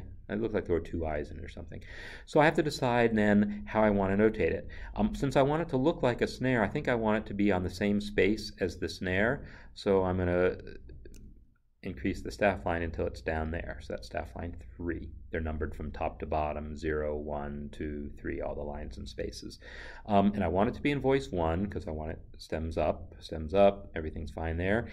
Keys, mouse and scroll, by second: 10.9 click, 11.6 Up.